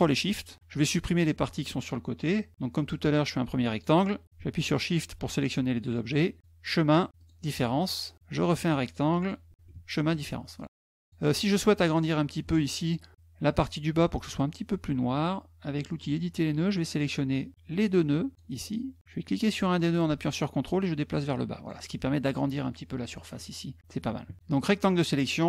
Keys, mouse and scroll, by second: 2.3 click, 2.6 click, 4.5 shift+click, 7.6 click, 8.5 click, 10.3 click, 10.8 click, 11.2 click, 12.2 middle click, 15.8 click, 17.4 click, 19.3-21.4 drag, 22.9 click, 23.2 click, 24.3 click.